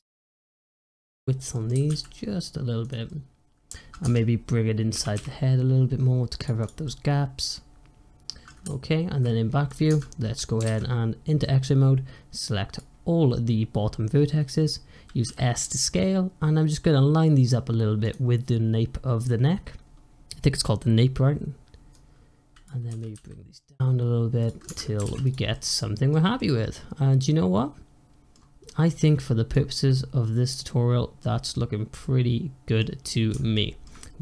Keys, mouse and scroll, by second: 0.5-1.6 middle drag, 1.6 s, 3.0 middle click, 3.9 Tab, 4.8 g, 6.5 drag, 6.7-8.5 middle drag, 8.5 `, 9.3 scroll up 2, 9.5 click, 9.8 Tab, 10.0-10.5 scroll down 1, 10.5 alt+z, 11.5 click, 13.1-15.1 scroll up 1, 15.1 s, 19.0-19.5 scroll up 1, 19.5 scroll down 1, 19.7-20.8 scroll up 1, 20.8 scroll down 1, 21.1-21.8 scroll up 1, 21.8 click, 22.8 g, 24.5 Tab, 24.9 alt+z, 25.1 click, 25.4-26.0 middle drag, 26.0 scroll down 1, 26.2-28.2 middle drag, 28.2 scroll down 2, 28.5-29.6 middle drag, 29.6 scroll up 2, 29.8-31.1 middle drag, 31.1 scroll down 1, 31.4-32.9 middle drag, 32.9-33.4 scroll up 2, 33.4-34.2 shift+middle drag.